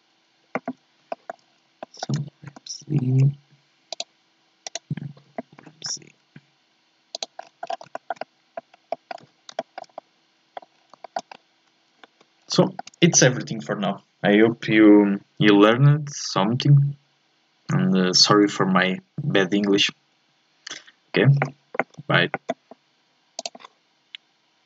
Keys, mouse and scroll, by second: 1.1 shift+middle click, 1.4 scroll up 1, 1.8 shift+middle click, 2.5 g, 4.7 right click, 5.6 g, 7.4-7.9 scroll down 1, 7.9 shift+middle click, 8.7 scroll up 1, 8.9 middle click, 9.2 z, 9.6-10.8 shift+middle drag, 10.8 scroll down 3, 11.0 shift+middle click, 11.3-12.0 scroll up 2, 12.0 a, 12.3 scroll down 3, 12.6-16.3 shift+middle drag.